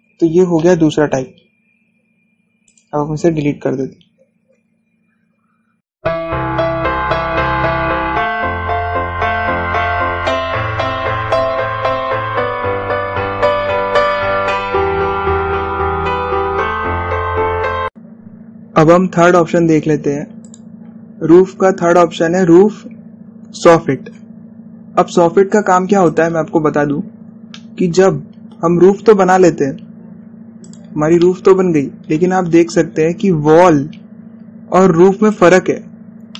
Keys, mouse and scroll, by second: 0.3 scroll down 1, 1.2-3.3 shift+middle drag, 3.3 click, 21.6 click, 27.2 click, 28.0-28.4 scroll down 1, 28.6-30.2 shift+middle drag, 30.2-30.8 scroll up 1, 32.3-33.6 middle drag, 33.6 scroll up 1, 35.7-36.1 scroll up 1.